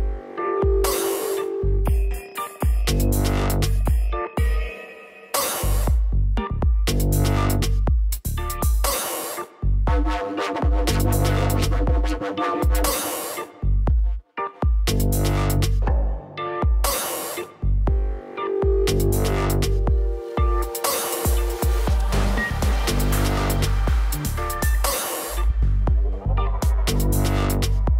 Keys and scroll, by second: 3.4 ctrl+g, 6.2 l, 7.5 i, 8.1 Return, 8.8 ctrl+j, 9.9 shift+Right, 21.2-23.1 typing, 27.2 shift+Left.